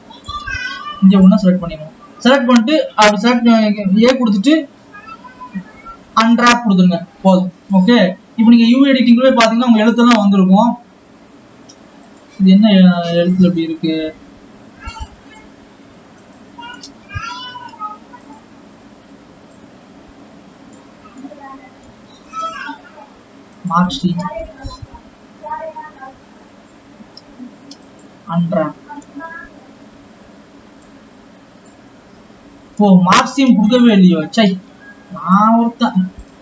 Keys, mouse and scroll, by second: 2.8 a, 7.9 click, 18.6-20.3 drag, 21.1 scroll up 1, 22.4 scroll up 1, 24.1 ctrl+e, 28.4 u, 31.6 click, 35.4-36.4 drag.